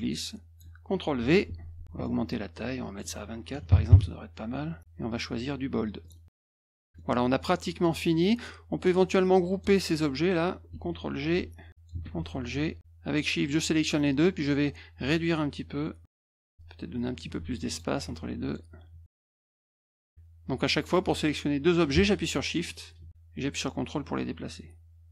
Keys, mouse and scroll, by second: 1.4 ctrl+v, 1.8 ctrl+a, 2.8 click, 3.5 2, 3.7 4, 3.9 Return, 5.1 click, 6.0 click, 6.9 middle click, 8.1-9.6 drag, 11.3 ctrl+g, 11.7 click, 12.0 ctrl+g, 13.1 click, 15.0-16.5 drag, 17.7 click, 18.4 click, 19.4 click, 20.7 click, 22.6 click, 23.1-25.1 drag.